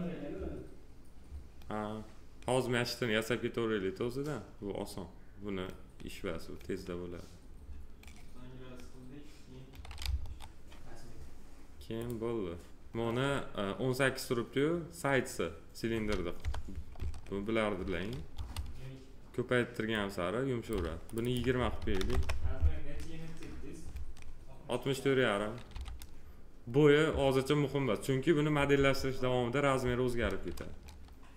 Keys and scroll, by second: 10.0 F4, 16.4 p, 18.3 F4, 21.8 2, 22.1 Return, 25.7 f.